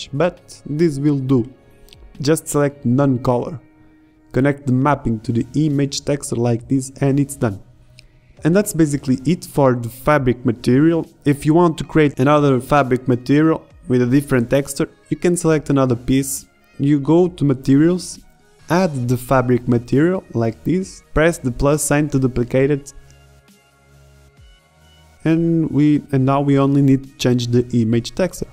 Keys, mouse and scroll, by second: 0.8 click, 7.7 shift+z, 25.6 middle click.